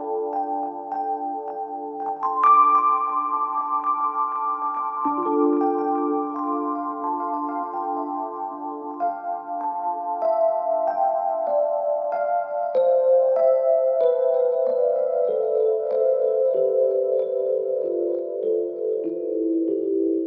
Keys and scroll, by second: 4.7 ctrl+z, 17.9 Escape, 18.1 ctrl+z.